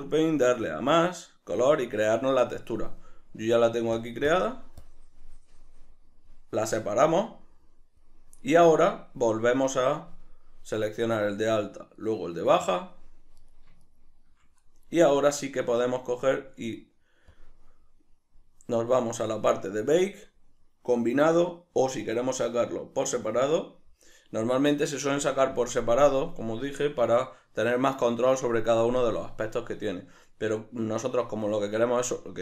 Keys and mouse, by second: 0.7-3.1 drag, 2.1 Escape, 3.1 middle click, 4.3 click, 4.8 click, 7.0-10.7 drag, 9.5 Tab, 10.7 right click, 12.0 shift+right click, 13.4 right click, 13.8 shift+right click, 17.3 click, 18.0-21.2 middle drag, 21.2-23.4 drag.